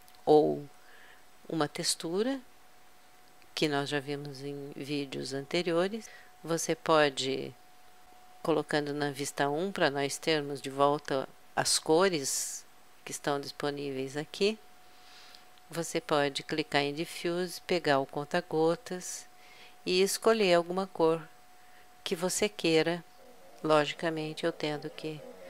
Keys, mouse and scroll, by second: 9.5 KP_1, 16.7-18.4 drag, 23.3-24.6 drag.